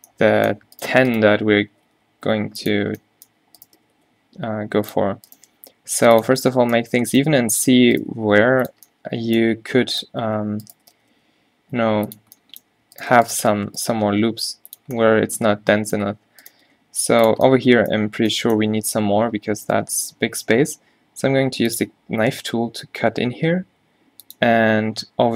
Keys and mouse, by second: 0.8-3.1 drag, 2.0 g, 3.7-6.5 drag, 3.9 g, 5.4 g, 7.3 g, 8.2 g, 11.0 g, 14.0 g, 16.7 g, 20.6 k.